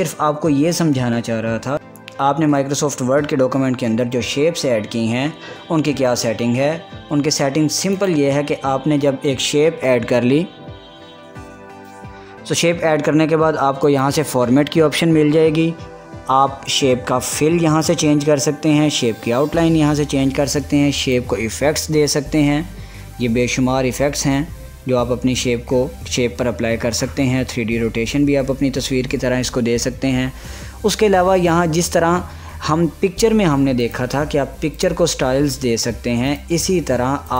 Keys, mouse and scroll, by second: 0.0 click, 1.1 click, 1.5 scroll up 1, 9.1 click, 15.0 click, 22.2 click, 35.1 click.